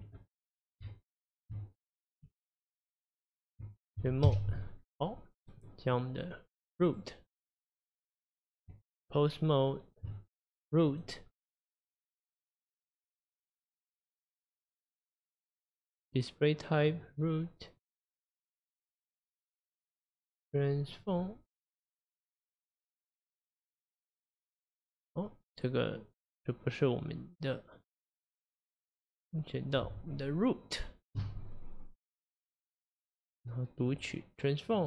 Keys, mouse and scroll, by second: 0.0 Tab, 0.2-0.8 middle drag, 0.8 Tab, 2.3 Tab, 4.3 KP_Divide, 4.8 scroll down 1, 5.1-6.9 middle drag, 6.9 click, 7.5 click, 8.7 Tab, 10.9 click, 13.3-14.0 scroll up 2, 14.0-14.4 drag, 14.4-15.1 scroll up 4, 16.0-16.9 drag, 19.0-21.0 drag, 21.9 click, 28.8 click, 32.1 click, 33.8 click.